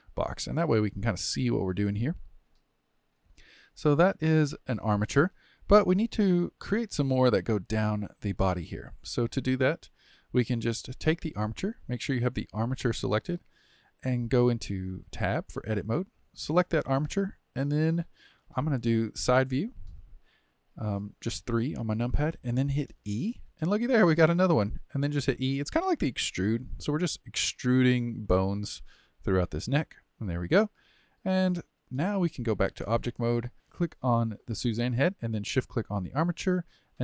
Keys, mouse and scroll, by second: 1.0-3.7 middle drag, 3.7 scroll up 2, 4.1-11.1 shift+middle drag, 11.1 click, 11.9 click, 15.2 Tab, 15.9 click, 18.4 KP_3, 19.9-22.7 shift+middle drag, 22.7 e, 25.0 e, 27.0 e, 28.7 e, 31.6 middle click, 32.4 Tab, 32.9-33.5 middle drag, 33.7 click.